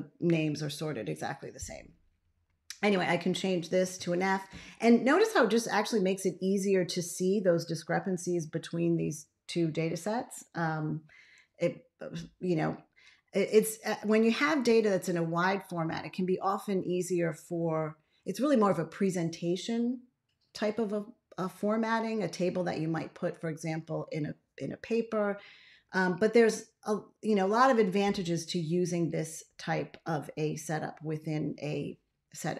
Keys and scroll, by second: 3.8 shift+f.